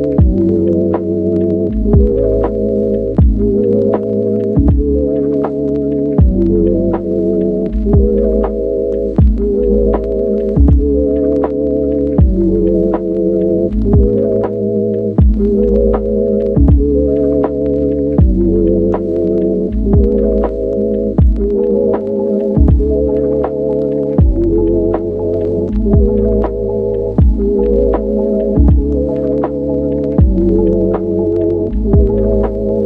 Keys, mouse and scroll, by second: 0.6 click, 1.1 g, 1.3 z, 2.3 click, 2.8-4.5 middle drag, 3.3 s, 5.2 g, 5.4 y, 5.9 click, 8.1 Tab, 8.5 click, 10.5 i, 13.0 e, 14.1 s, 14.5 click, 19.9-20.2 ctrl+r, 23.3 ctrl+click, 24.2 ctrl+click, 24.7 click, 25.4 click, 26.3 ctrl+click, 27.1-28.4 middle drag, 28.4 e, 30.8 middle click.